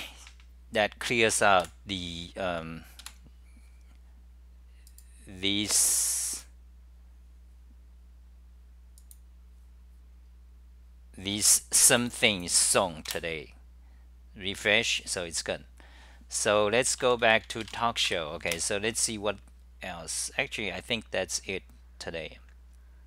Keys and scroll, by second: 1.7 super+w, 3.1 super+w, 18.6 ctrl+g, 18.6 super+r.